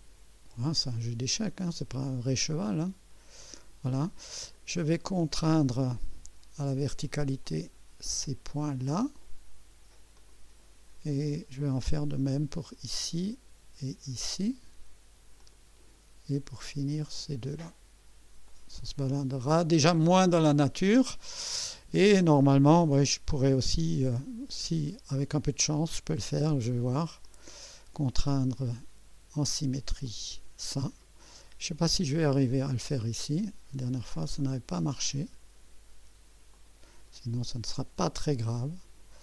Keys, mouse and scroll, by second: 2.5 click, 4.5 right click, 5.8 click, 7.4 click, 8.6 click, 10.1 click, 12.5 click, 14.1 click, 15.4 click, 17.1 click, 18.4 click, 20.0 click, 24.5 click, 25.6 click, 27.2 click, 30.0 click, 32.5 click, 34.5 click, 36.5 click.